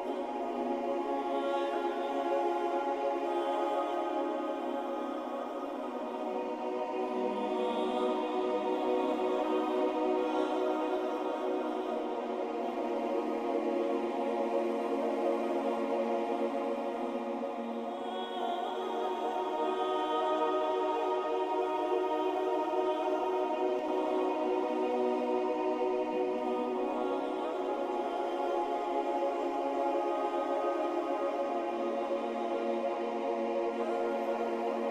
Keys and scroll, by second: 6.6 ctrl+z, 13.6 ctrl+z, 15.5 ctrl+c, 15.8 ctrl+b, 16.2 Down, 19.1-20.5 typing, 23.1 typing.